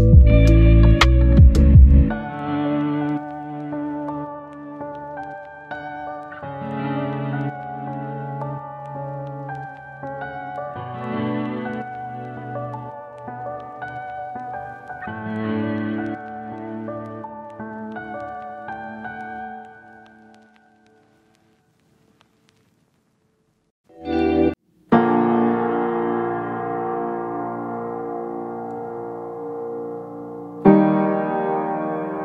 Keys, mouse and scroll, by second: 0.3-0.6 scroll up 1, 0.6 click, 1.9 right click, 2.3 click, 4.2 right click, 4.5-4.8 scroll up 1, 4.8-10.3 drag, 10.5 scroll down 1, 10.6-10.9 scroll up 1, 10.9-16.6 drag, 16.6 right click, 17.1 click, 19.5 scroll down 1, 19.6-20.0 scroll up 1, 20.0 scroll down 1, 20.1 scroll up 1, 20.2 click, 24.1 right click, 24.3 scroll down 1, 24.4-24.8 scroll up 1, 24.8 click, 25.3 right click, 25.6-26.7 drag, 26.7 click, 28.1 click, 28.4-28.8 scroll up 1, 28.8 click, 29.6 click, 30.2 scroll down 1, 30.3 scroll up 1, 30.5 click.